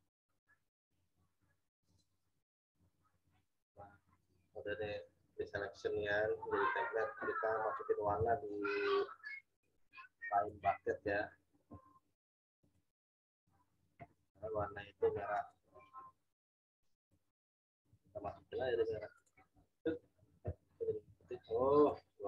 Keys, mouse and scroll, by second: 1.8 click, 8.1 g, 9.6 right click, 10.3 click, 12.6 click, 15.3 click, 17.8 g, 19.1 click, 20.8 ctrl+z, 21.7 click.